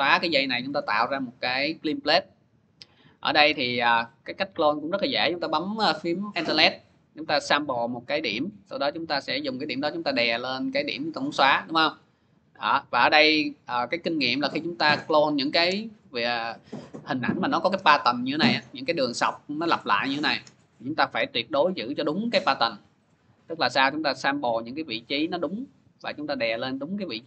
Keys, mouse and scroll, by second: 0.6-1.1 click, 0.7 click, 1.3 click, 1.6 click, 1.7 click, 1.8 click, 1.9 click, 2.0 click, 2.2-3.1 click, 2.4 click, 2.5 click, 2.5 click, 3.2 click, 3.3 click, 7.4 alt+click, 10.7 click, 14.4 click, 16.1-17.5 drag, 17.2-18.0 typing, 20.9 click, 24.4 alt+click.